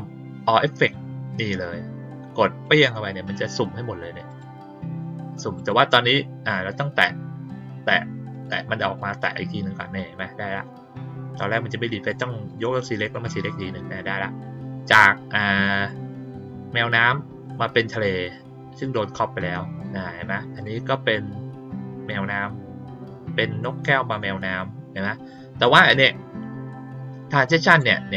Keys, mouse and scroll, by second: 2.6 click, 4.2 click, 5.5 click, 7.8 click, 8.3 click, 8.9 click, 12.0 click, 12.4 click, 13.0 click, 20.6 click, 27.6 click.